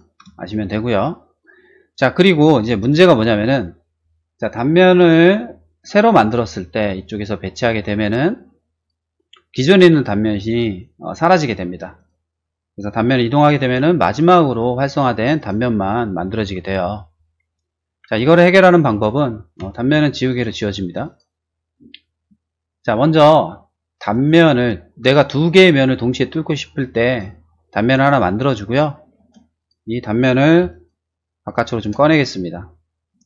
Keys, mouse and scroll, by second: 0.3 shift+middle click, 0.8 shift+middle click, 2.8 shift+middle click, 4.8 click, 6.2 click, 7.9 middle click, 8.7 click, 10.5 middle click, 11.9 click, 13.0 m, 13.3 click, 15.3 click, 17.8 ctrl+z, 19.6 e, 20.2 click, 21.7 middle click, 22.4 shift+middle click, 24.0 click, 27.0 click, 27.8 click, 28.2 middle click, 29.1 space, 29.5 click, 30.5 m, 30.7 click, 31.4 click, 31.7 space, 32.5 shift+middle click.